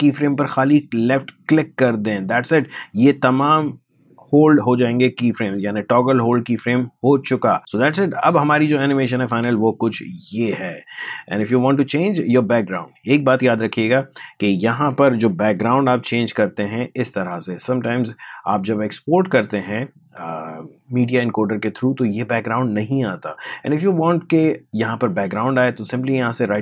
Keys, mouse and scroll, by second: 5.3-8.7 drag, 8.7 space, 11.4 space, 14.8 space, 15.6 ctrl+k, 16.7 click, 23.5 click, 25.1 right click.